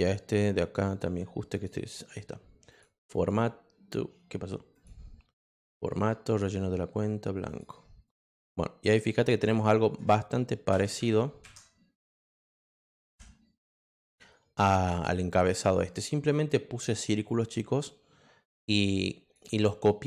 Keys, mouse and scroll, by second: 0.4 click, 0.9 click, 1.5 click, 2.7 click, 3.1 click, 4.7 click, 5.4 click, 6.3 click, 7.4 click, 8.0 click, 9.5 click, 14.0 click, 17.2-19.3 drag.